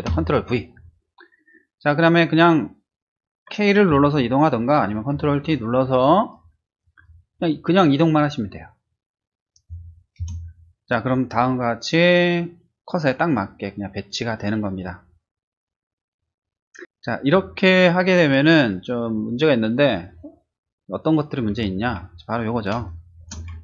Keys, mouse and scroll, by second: 0.2 ctrl+v, 3.9 k, 5.1 ctrl+t, 10.2 Return, 21.5 ctrl+-, 22.8 space.